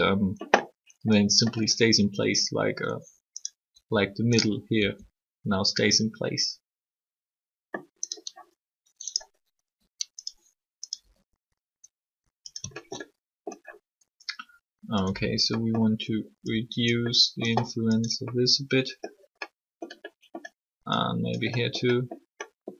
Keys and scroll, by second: 3.7 r, 9.6 r.